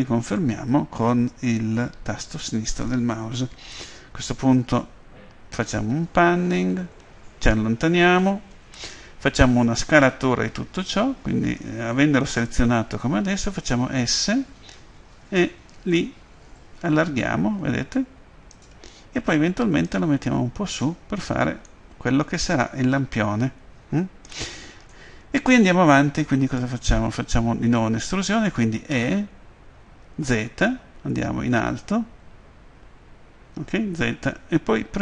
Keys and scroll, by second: 13.5 s, 28.8 e, 31.3 z.